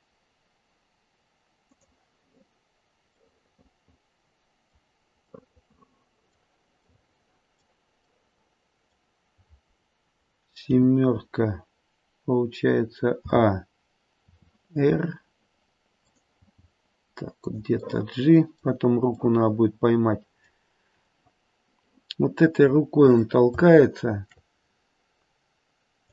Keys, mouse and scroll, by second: 3.4 middle click, 5.3 middle click, 5.9 middle click, 6.9 middle click, 8.1 middle click, 8.7 middle click, 10.6 KP_7, 13.2 a, 14.1 r, 16.4 g, 17.7 middle click, 18.2 middle click, 19.2 middle click, 19.5 middle click, 20.0 middle click, 22.6 middle click, 23.7 shift+middle click, 24.5 shift+middle click, 24.5-25.7 scroll up 2, 25.7-26.0 scroll up 1, 26.0 click.